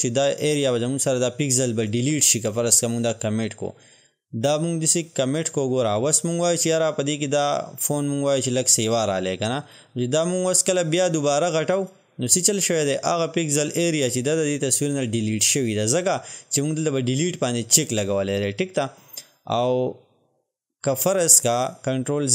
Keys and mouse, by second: 5.3 click, 9.7-21.6 drag.